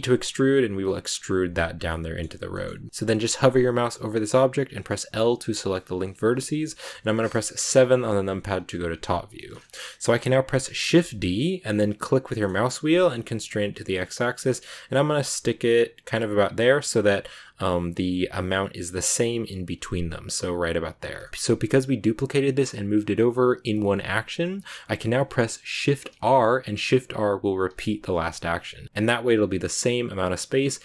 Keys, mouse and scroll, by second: 1.6 scroll down 1, 1.8-3.8 middle drag, 7.6 KP_7, 8.3 click, 8.9 scroll down 1, 9.3 shift+middle click, 9.5-10.6 scroll down 2, 10.8 shift+d, 21.1 shift+middle click, 25.4 click, 26.0 shift+r, 27.6 shift+r, 28.4 scroll down 3.